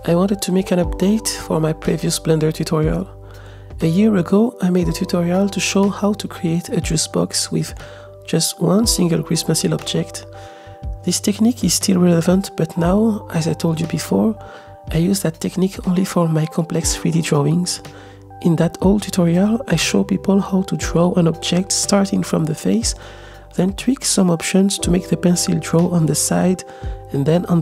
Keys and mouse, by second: 0.9 click, 1.5 space, 4.5 s, 12.0 space, 12.3 click, 13.1-14.7 middle drag, 15.0 s, 15.6-16.5 shift+middle drag, 17.0-21.0 middle drag, 21.4 ctrl+z, 21.7 click, 22.1 click, 22.4 click, 22.6 click, 23.0 middle click, 23.9-24.9 drag, 24.9 ctrl+z, 24.9 middle click, 25.6 middle click, 25.8 middle click, 25.8 click, 25.9 middle click, 26.0 click, 26.1 ctrl+r, 26.2 ctrl+z, 26.2 click, 26.3 shift+d, 26.3 x, 26.4 click, 26.5 middle click, 26.7 middle click, 26.7 click, 26.8 ctrl+Tab, 26.9 middle click, 27.1-27.6 drag.